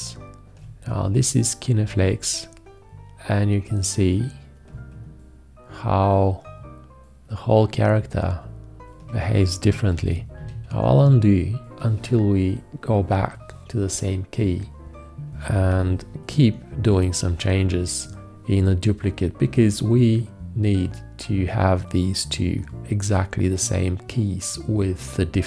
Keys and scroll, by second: 10.2 ctrl+z, 16.0 x.